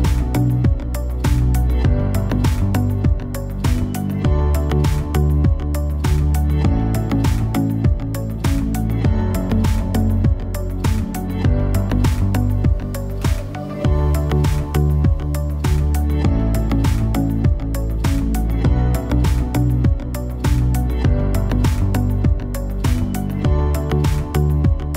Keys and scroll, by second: 4.2 a, 24.0 Down.